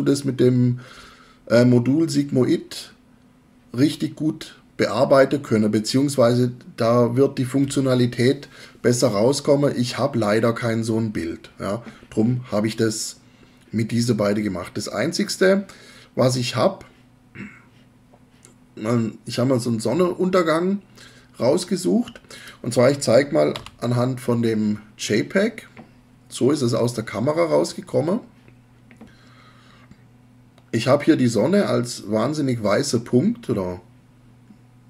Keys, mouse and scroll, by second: 23.6 f.